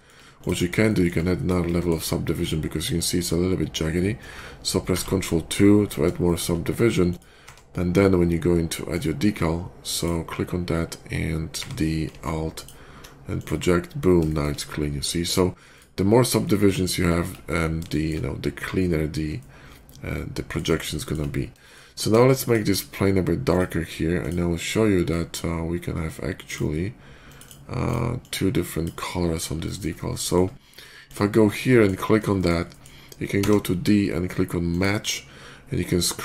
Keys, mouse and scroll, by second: 0.2 shift+click, 0.7 shift+middle drag, 1.2 shift+middle drag, 1.5 shift+middle drag, 4.8 ctrl+2, 5.7 middle click, 6.1 shift+middle drag, 6.4-6.9 shift+middle drag, 6.9 shift+click, 7.3 d, 8.8 click, 9.8 click, 12.4 alt+d, 12.4 click, 13.2 click, 13.7-14.1 alt+middle drag, 14.1-15.0 shift+middle drag, 15.6 shift+click, 16.3-16.7 shift+middle drag, 16.9 shift+middle click, 17.2 shift+middle click, 17.7 shift+middle click, 19.2-20.4 shift+middle drag, 20.8 shift+middle drag, 21.5 shift+middle click, 21.7 shift+middle drag, 21.9 shift+middle drag, 22.3 shift+click, 23.3 shift+click, 24.0 shift+click, 24.9-26.4 drag, 27.1 click, 27.3 click, 27.7 click, 28.0-28.7 drag, 29.0 scroll up 1, 29.1-29.7 middle drag, 29.8 scroll up 1, 30.1 shift+middle click, 30.9 shift+click, 31.2 shift+middle drag, 31.6 shift+middle click, 32.2 shift+middle click, 32.5 shift+middle click, 33.2 d, 34.5 click, 35.9 scroll down 1.